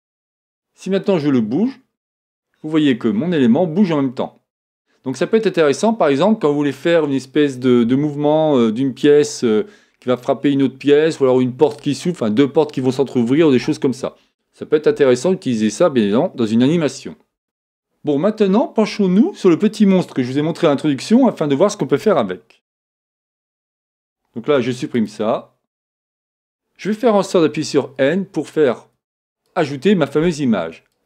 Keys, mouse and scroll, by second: 5.5-7.8 middle drag, 24.6 x, 27.5 n, 29.4-31.0 drag.